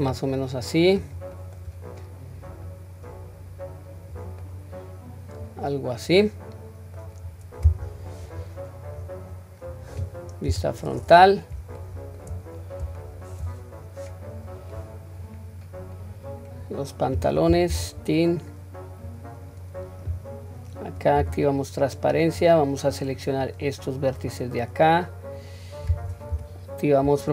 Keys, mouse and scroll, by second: 0.3-1.0 middle drag, 1.4 middle click, 2.7-4.2 drag, 4.4-7.0 middle drag, 7.3-7.9 scroll up 2, 7.9 scroll down 1, 9.0 click, 9.0 scroll down 1, 10.5 KP_1, 11.8-12.2 shift+middle drag, 13.0-13.3 shift+middle drag, 13.7-14.6 scroll up 1, 14.6 click, 14.6 scroll up 1, 15.3-16.1 scroll down 1, 16.1-16.9 scroll down 1, 17.7 Tab, 19.1-20.8 scroll up 1, 21.2 q, 22.9-24.1 drag.